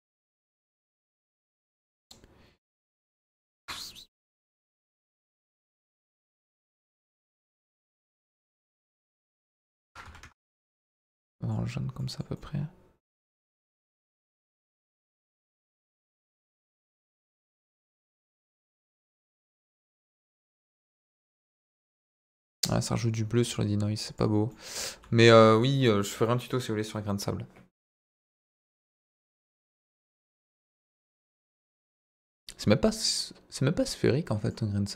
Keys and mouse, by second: 5.1-6.8 drag, 7.3-8.3 drag, 9.3-10.5 drag, 10.8-11.5 middle drag, 11.9 middle drag, 12.3-13.7 middle drag, 14.5 drag, 16.8 middle drag, 19.0 click, 20.4 click, 22.4-22.7 middle drag, 24.5 middle drag, 24.7 z, 26.2 middle drag, 34.4 drag.